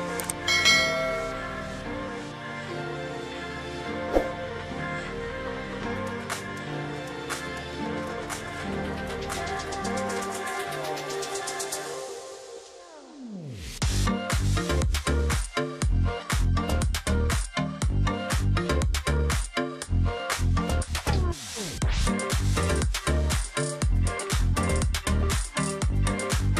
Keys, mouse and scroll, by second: 0.2 ctrl+z, 0.8 ctrl+z, 1.7 ctrl+click, 2.4 space, 3.2 ctrl+click, 3.9 shift+x, 5.4 shift+x, 8.1 ctrl+click, 8.2-8.8 alt+scroll down 1, 8.8-9.3 alt+scroll up 1, 9.7 double click, 10.5-11.2 alt+scroll up 1, 11.2 space, 11.8 alt+scroll down 1, 11.9 alt+scroll up 1, 12.2 alt+scroll down 1, 12.4 ctrl+z, 13.1 double click, 13.4-13.7 alt+scroll down 1, 13.7 alt+scroll up 1, 13.8 space, 14.4 alt+scroll up 1, 15.0 ctrl+click, 15.7 space, 16.7 space, 18.6 ctrl+click, 18.8 alt+scroll up 1, 21.9 shift+x, 22.1 ctrl+click, 22.3 alt+scroll down 1, 22.5 space, 22.8-23.2 alt+scroll up 1, 23.2 ctrl+click, 24.9 space.